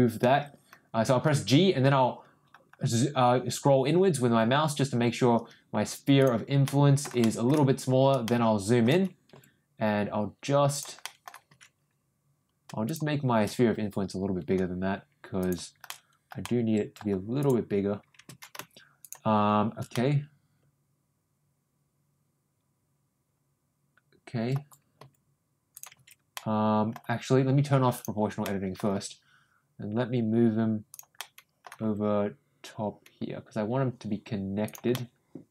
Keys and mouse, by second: 1.2 ctrl+g, 4.3 g, 6.6 middle click, 8.2 shift+middle click, 9.3 g, 11.0 middle click, 12.8 click, 15.4 ctrl+shift+click, 15.8 shift+middle click, 16.4 middle click, 17.4 click, 19.0 shift+click, 19.9-24.4 middle drag, 24.9 g, 26.3 middle click, 27.9 click, 28.4 middle click, 28.9 ctrl+g, 31.1 middle click, 31.8 g, 34.9-35.5 middle drag.